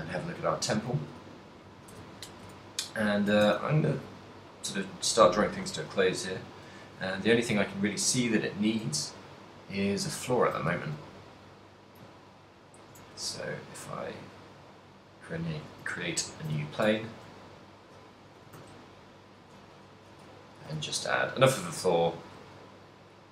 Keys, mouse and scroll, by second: 0.3 middle click, 0.9 a, 1.2 middle click, 2.0 a, 2.5 KP_1, 3.5 shift+a, 6.8 alt+g, 7.8 z, 8.3 g, 10.6 ctrl+click, 10.9 g, 12.9 ctrl+click, 13.3 s, 14.4 click, 14.6 s, 15.7 click, 16.1 ctrl+middle click, 16.7 z, 17.0 ctrl+middle click, 17.5 middle click, 18.3 s, 19.8 click, 20.2 middle click, 20.8 g, 21.8 click, 22.1 middle click, 22.5 s.